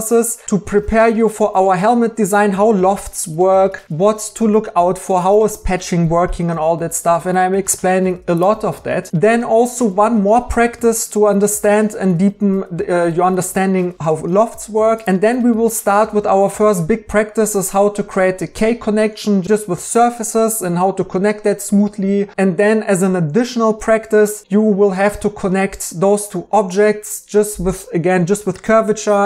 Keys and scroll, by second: 9.1 Tab, 22.3 e.